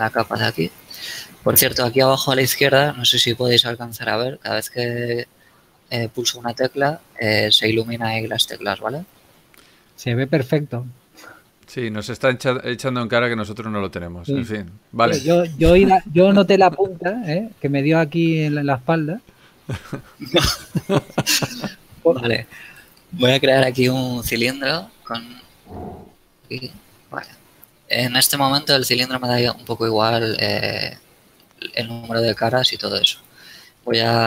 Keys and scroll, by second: 12.8 KP_2, 13.1 KP_1, 24.0 shift+a.